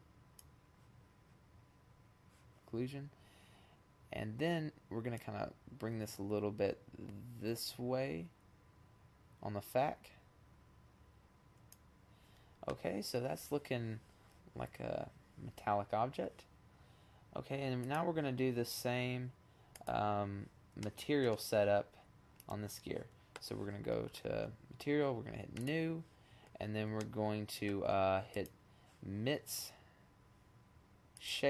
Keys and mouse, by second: 3.5-5.1 drag, 16.2-17.1 drag, 18.8-20.1 middle drag, 20.5 middle click, 21.9-23.8 middle drag, 25.2 middle click, 26.3 middle click, 27.0-28.1 drag.